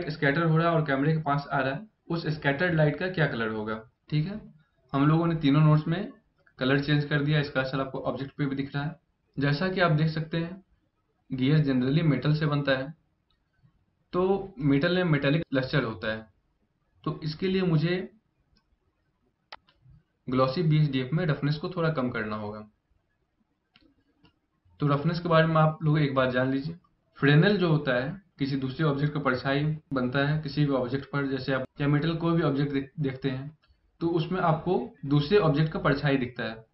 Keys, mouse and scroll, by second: 19.2 click.